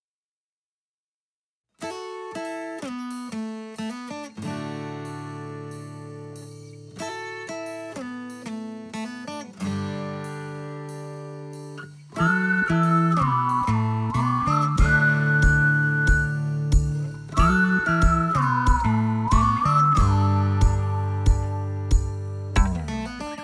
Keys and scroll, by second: 0.2 Escape, 21.3 d.